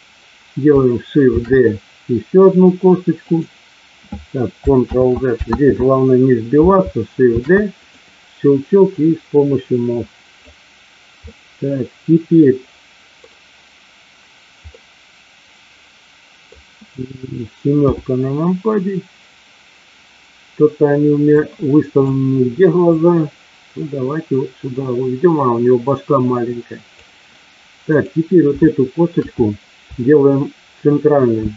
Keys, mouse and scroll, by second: 1.3 shift+d, 3.3 click, 4.8 ctrl+z, 5.5 ctrl+z, 7.3 shift+d, 8.9-10.3 drag, 11.1-13.1 middle drag, 14.6-16.5 middle drag, 17.8 KP_7, 21.4 click, 22.9-26.9 drag, 27.8 click, 28.6 shift+middle click, 31.3 shift+d.